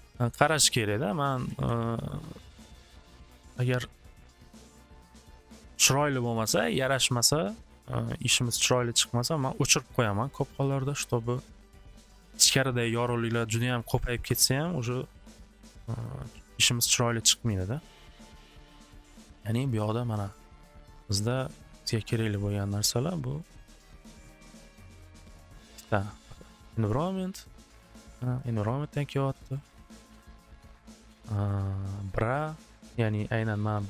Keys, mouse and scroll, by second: 0.0 click, 1.2 click, 1.4 alt+w, 1.6 alt+w, 3.0 click, 4.0 click, 4.4 click, 5.1 click, 6.2 click, 9.6 click, 9.7 click, 11.7 middle click, 12.1 click, 12.1 middle click, 13.0 click, 13.7 click, 14.2 click, 14.5 click, 15.2 click, 15.6 click, 16.0 click, 16.3 click, 17.0 click, 17.5 click, 17.7 click, 18.0 click, 18.3 click, 18.9 click, 19.1 click, 19.3 click, 19.6 click, 20.3 click, 20.5 click, 21.1 click, 21.7 click, 23.5 click, 24.2 click, 24.4 click, 26.0 click, 26.4 click, 28.2 click, 28.4 click, 28.9 click, 29.3 click, 29.7 click, 31.5 click, 31.9 click, 32.2 click, 32.3 click, 33.7 middle click.